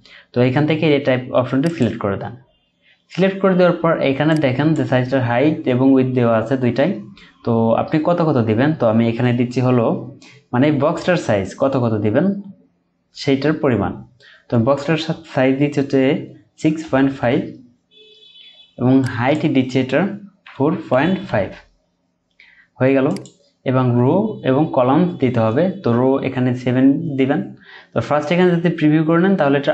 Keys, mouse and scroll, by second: 16.5-17.3 typing, 20.4-21.3 typing, 26.3-27.0 typing.